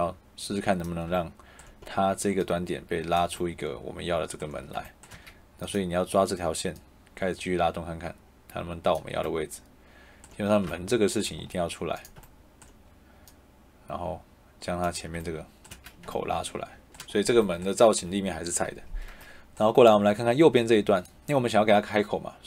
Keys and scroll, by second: 5.0 Escape, 15.6 shift+Escape.